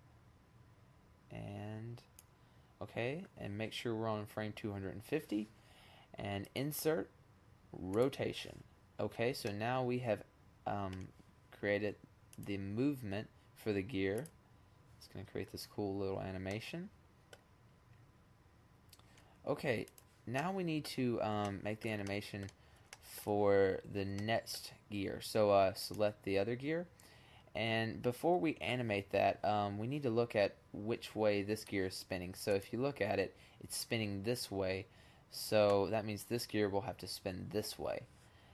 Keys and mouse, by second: 5.3 click, 8.7-9.5 middle drag, 11.2 click, 12.4-13.8 drag, 14.1-14.5 drag, 14.9 click, 15.3 middle click, 15.8-17.1 middle drag, 20.9-22.4 middle drag, 22.8-23.3 middle drag, 24.5-26.0 drag, 26.0 middle click, 31.5 click, 32.6 click, 32.8 click, 38.1-38.5 drag.